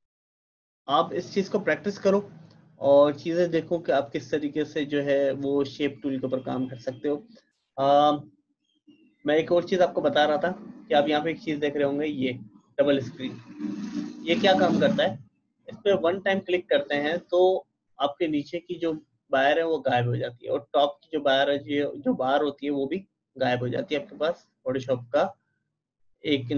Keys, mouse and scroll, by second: 16.4 click, 16.4-18.5 typing.